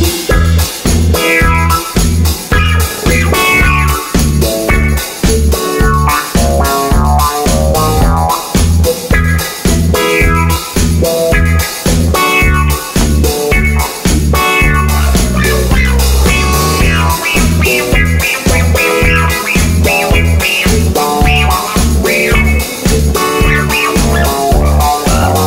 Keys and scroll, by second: 16.7 super+c, 16.8 super+v.